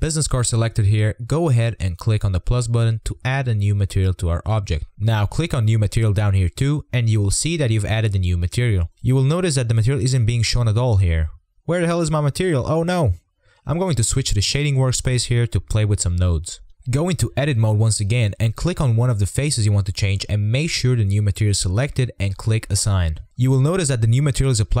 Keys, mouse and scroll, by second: 1.2-3.4 scroll up 18, 3.4-5.0 scroll up 5, 5.2-8.4 drag, 9.0-12.2 drag, 12.2 Tab, 14.4 click, 14.8-15.2 scroll up 10, 15.2 shift+middle click, 15.6 click, 17.2-19.0 drag, 19.8-21.4 drag, 21.6 drag, 22.7-24.8 drag.